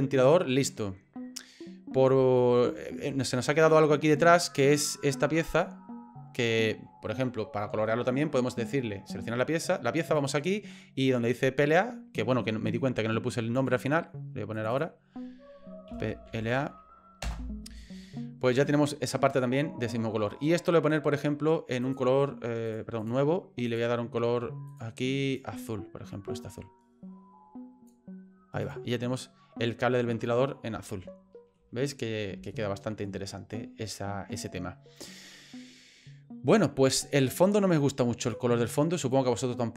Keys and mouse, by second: 2.4 shift+middle click, 5.6 right click, 10.2-13.7 drag, 14.6 click, 14.8-17.9 drag, 20.3 right click, 21.8-22.8 drag, 23.1 click, 23.7 click, 24.7 click, 30.9 shift+middle click, 32.5 shift+middle click, 38.2 click, 39.0 click.